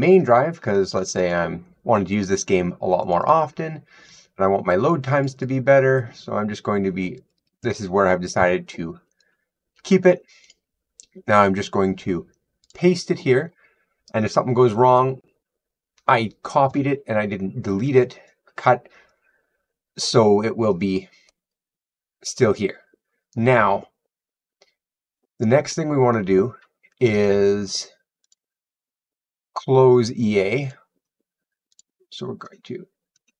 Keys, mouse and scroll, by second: 1.0 click, 1.1 click, 3.0 click, 3.1 click, 5.1 click, 5.2 click, 5.8 scroll, 7.1 click, 7.3 click, 8.3-8.8 scroll down 8, 9.0 click, 10.4 right click, 12.5 right click, 28.2 click, 30.5 click, 31.6 click.